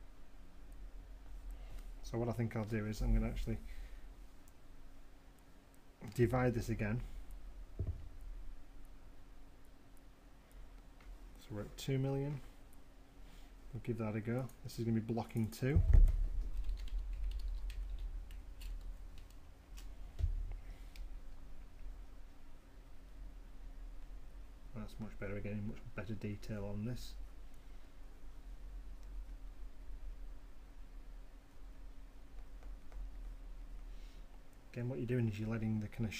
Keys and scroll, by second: 7.6 shift+d, 16.2-18.7 typing, 19.8 Return.